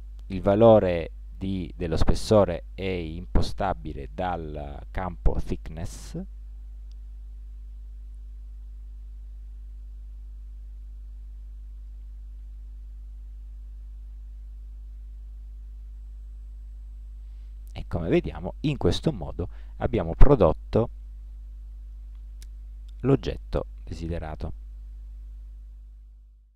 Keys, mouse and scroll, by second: 6.8 click, 13.4 z, 20.2 Tab.